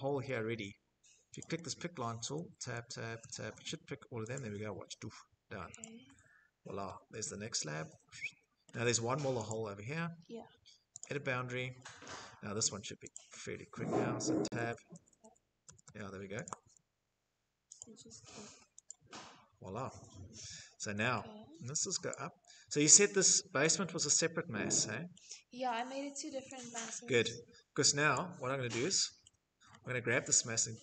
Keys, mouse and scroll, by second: 0.4 click, 1.4 Tab, 1.7 Tab, 2.2 Tab, 2.6 Tab, 7.7-11.1 shift+middle click, 10.0 click, 10.7 middle click, 10.9 middle click, 12.2 click, 13.6 Tab, 13.9 Tab, 14.2 Tab, 14.7 Tab, 20.9 scroll, 21.2 shift+click, 23.1 click, 23.6 middle click, 23.7 middle click, 23.8 middle click, 24.8-29.0 shift+middle click, 25.7 click, 27.1 click, 28.6 middle click, 28.7 middle click, 30.1 click.